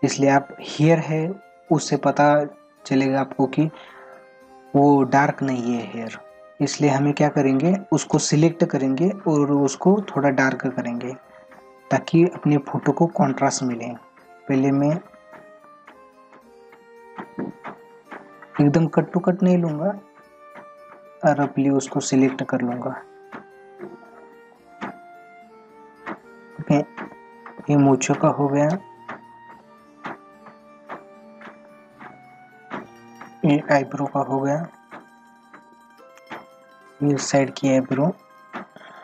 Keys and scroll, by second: 12.6 ctrl+=.